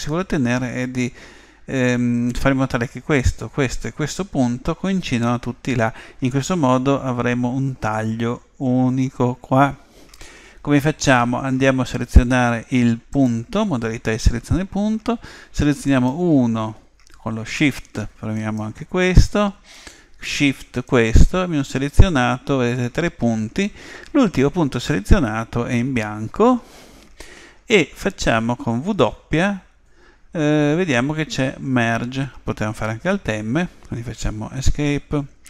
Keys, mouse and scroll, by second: 13.1 click, 15.9-17.7 right drag, 18.4-20.2 right drag, 20.9-22.7 right drag, 28.8 w.